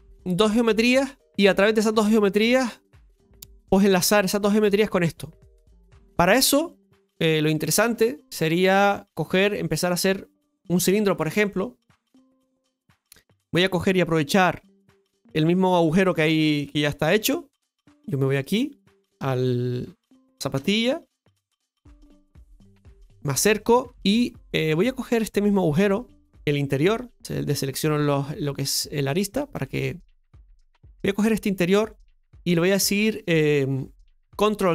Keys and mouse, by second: 3.5 middle click, 12.9 KP_Divide, 16.2 middle click, 17.1 KP_7, 17.2 KP_Divide, 18.3-19.2 right drag, 19.2 Tab, 19.7 right click, 20.5 KP_Divide, 22.6-23.2 shift+middle drag, 23.8 Tab, 24.2 shift+middle click, 25.2 middle click, 27.5 click, 29.5 click, 31.2 alt+shift+right click, 32.5 middle click.